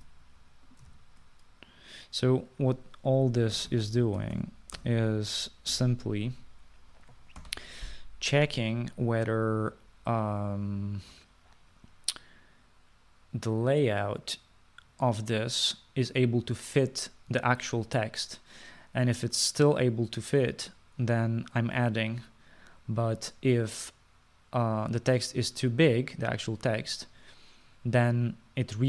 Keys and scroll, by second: 0.9 ctrl+c, 2.0 ctrl+v, 4.3 BackSpace, 4.5-6.8 BackSpace, 6.8 =, 8.5 ctrl+s.